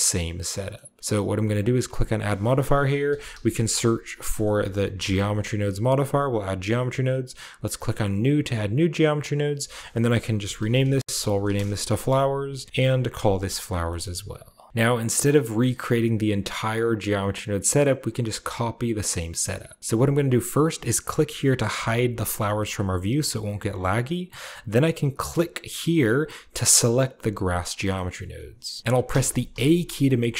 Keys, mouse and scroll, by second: 0.5-1.9 middle drag, 1.9-3.2 drag, 3.0-4.9 typing, 6.2 click, 6.7-8.1 scroll down 1, 8.1-10.6 drag, 10.3-11.9 typing, 12.4 click, 12.7 ctrl+c, 12.7 ctrl+click, 12.8 ctrl+click, 13.1-14.7 ctrl+drag, 13.2 ctrl+v, 13.7-15.8 ctrl+middle drag, 14.7-15.8 scroll up 1, 21.6 click, 25.1-27.0 drag, 27.6-28.8 scroll down 2, 27.8-30.0 middle drag, 28.9 a, 29.3 a.